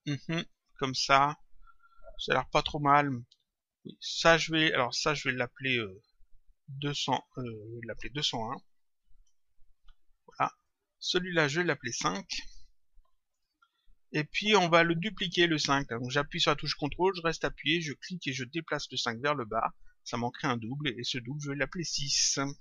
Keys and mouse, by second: 0.5 click, 3.7 click, 4.8 click, 10.5 click, 13.2 Return, 17.7 ctrl+click, 21.3 click.